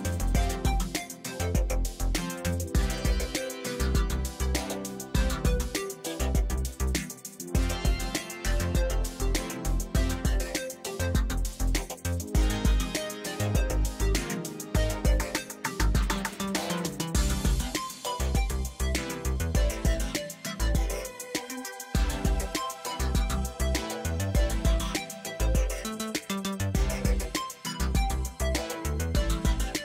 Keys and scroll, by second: 5.1 ctrl+space, 5.4 ctrl+space, 22.4 ctrl+alt+z.